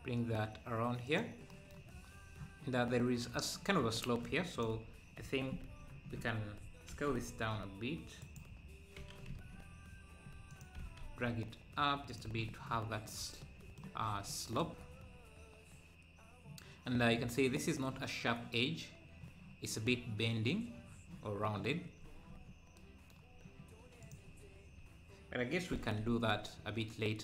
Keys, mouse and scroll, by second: 2.1 scroll up 1, 2.9-3.6 scroll up 2, 4.5 click, 4.6 Tab, 6.1 ctrl+KP_Add, 6.9 s, 8.9 s, 10.8 g, 12.2 Tab, 12.9-13.4 scroll down 1, 13.4 middle click, 13.9 scroll down 2, 14.2 middle click, 14.8-15.2 scroll up 1, 15.2 scroll down 1, 15.7 scroll down 1, 17.0 scroll down 1, 22.0 scroll up 2, 22.3 Tab, 24.0-25.7 drag, 25.7 g.